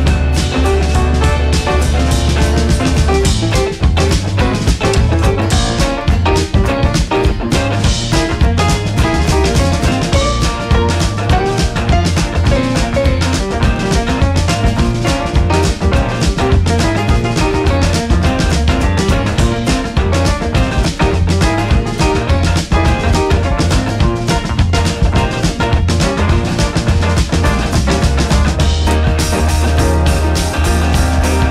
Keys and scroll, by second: 0.0 Down, 2.6 Down, 3.6 Up, 4.4 Right, 4.6 Down, 6.0 Down, 26.9 ctrl+0.